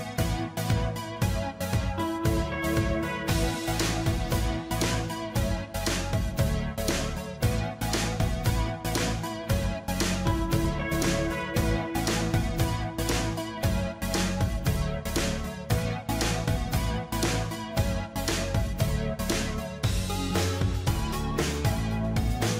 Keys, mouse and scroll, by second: 2.3 ctrl+d, 2.6 ctrl+d, 3.5 ctrl+t, 4.8 alt+click, 8.3 ctrl+a, 9.9 ctrl+d, 10.0 ctrl+d, 15.0 ctrl+j, 17.9 ctrl+j, 18.1 ctrl+j, 20.6 ctrl+j.